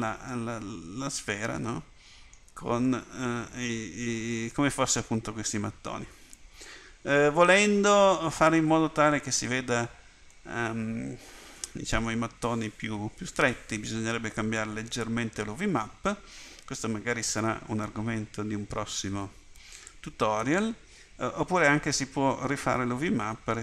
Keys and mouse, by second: 2.9 middle click, 10.4-11.7 middle drag, 19.9-23.5 drag.